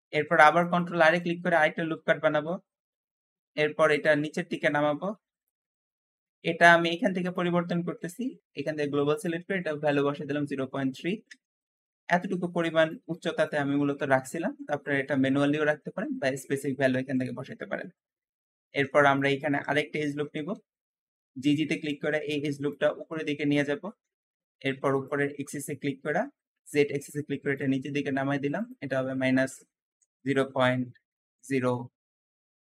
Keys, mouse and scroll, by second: 0.0 ctrl+r, 0.0 Escape, 3.4 click, 7.2 click, 8.4 click, 9.0-12.1 drag, 9.9-11.0 typing, 11.1 Return, 11.2 Return, 17.0 Escape, 17.5 scroll up 1, 18.4 ctrl+r, 18.5 ctrl+r, 18.5 ctrl+r, 20.1 g, 20.2 g, 20.3 g, 23.1-23.5 scroll up 1, 23.5 shift+middle click, 24.0-24.9 scroll up 1, 24.9 shift+click, 29.3-31.7 drag, 29.3-31.2 typing.